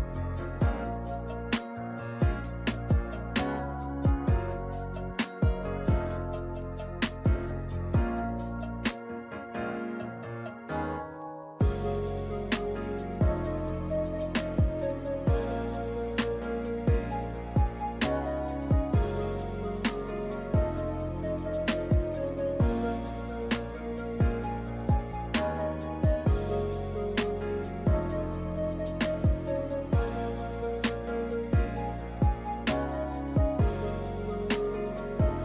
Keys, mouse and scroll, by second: 0.2 b, 3.1 click, 4.0 click, 5.0 click, 5.1 click, 8.4 click, 9.4 click, 10.2 click, 10.3 click, 15.2 click, 18.7 click, 20.4 click, 23.4 z, 24.3 Tab, 26.6 shift+middle click, 27.6 ctrl+middle click, 28.5 z, 28.6 shift+middle click, 29.0 ctrl+middle click, 29.3 shift+middle click, 30.6 click, 34.0 click.